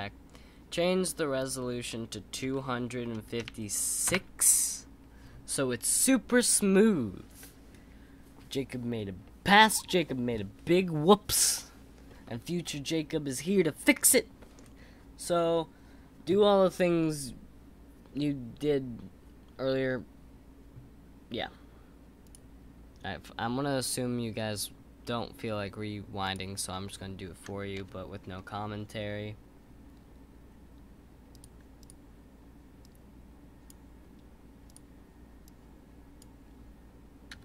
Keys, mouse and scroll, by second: 1.4-4.5 drag, 6.4 click, 27.7 KP_1, 31.3-31.8 drag.